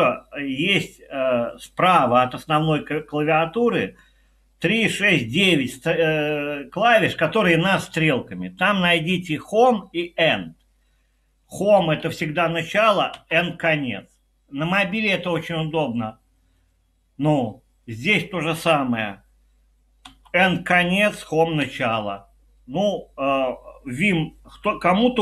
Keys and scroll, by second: 11.8 Home, 13.1 End, 20.1 End, 21.6 Home.